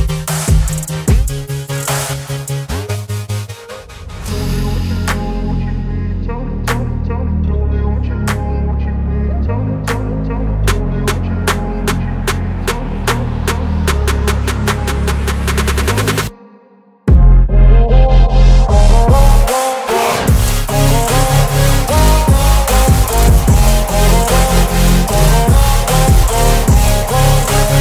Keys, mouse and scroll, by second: 1.7-2.5 drag, 21.8 click, 21.9 click.